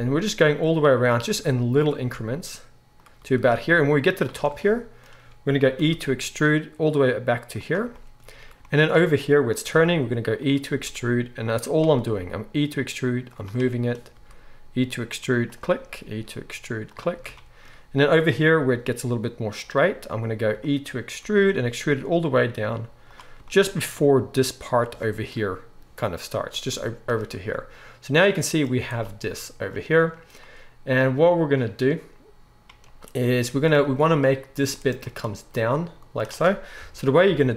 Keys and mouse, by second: 1.2 e, 2.0 e, 3.2 e, 5.8 e, 9.7 e, 10.7 e, 11.9 e, 14.1 e, 15.9 e, 18.6 e, 21.2 e, 28.7 z, 28.9 click, 29.0-37.5 middle drag, 36.8 KP_3, 37.3 KP_1.